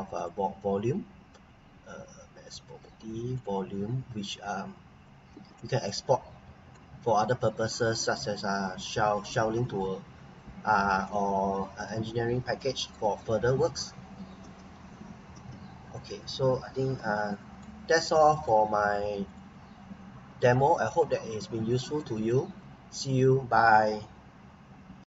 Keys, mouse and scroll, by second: 0.2 click, 3.3 click, 4.8 scroll up 1, 5.3 Escape, 5.5 right click, 6.0 scroll up 1, 6.7 right click, 7.3 scroll down 1, 8.4 scroll up 1, 9.5 scroll down 1, 10.5 scroll up 1, 11.1 right click, 12.1-12.6 scroll down 1, 13.1 scroll up 1, 13.5 scroll down 1, 14.4 ctrl+z, 15.3 z, 16.9 Escape, 17.2 scroll down 1, 17.6 right click, 18.1 right click, 19.2 click, 20.4 Delete, 21.6 scroll up 1, 22.0 right click, 22.5 scroll down 1.